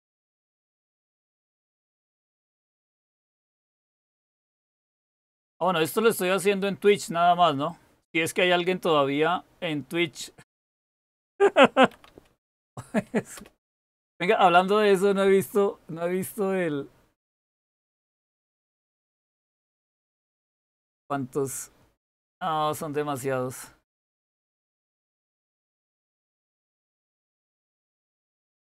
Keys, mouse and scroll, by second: 11.4-12.5 typing, 13.3 Return.